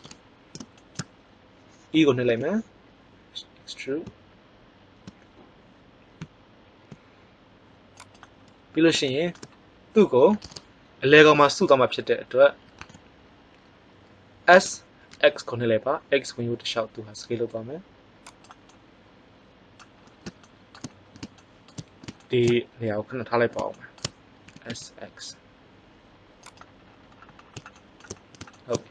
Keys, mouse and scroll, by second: 2.2 e, 8.1-9.9 drag, 14.4 s, 18.7-19.9 middle drag, 24.4 s.